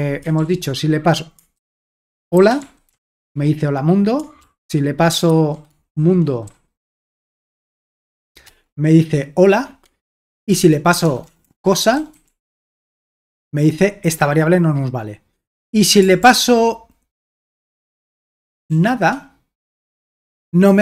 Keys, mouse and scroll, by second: 0.4 ctrl+p, 1.6 ctrl+w, 2.1-3.6 typing, 4.4 ctrl+p, 7.3-8.0 typing, 10.5 ctrl+p, 11.0-13.5 typing, 16.2 ctrl+p, 17.9 BackSpace, 18.1 BackSpace, 18.3 BackSpace, 18.5 BackSpace, 19.7 Return.